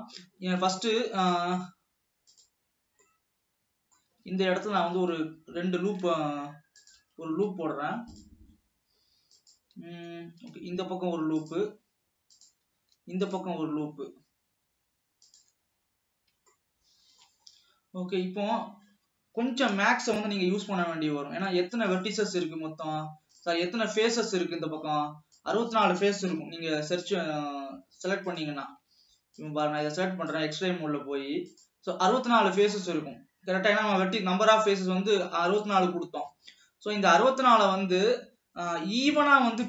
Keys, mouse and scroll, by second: 0.7 alt+a, 2.5 alt+a, 3.1-4.5 middle drag, 4.5 alt+a, 4.9 ctrl+r, 11.0 ctrl+r, 13.0 ctrl+r, 16.0 scroll up 1, 16.7 shift+middle click, 17.5-17.8 scroll up 2, 19.5 g, 22.6 alt+a, 23.6 click, 24.3 click, 26.3 KP_7, 27.2-28.3 scroll down 2, 28.3 click, 29.2 alt+a, 29.4-32.3 drag, 32.3-35.3 middle drag, 35.7-36.7 middle drag, 36.7 scroll up 2.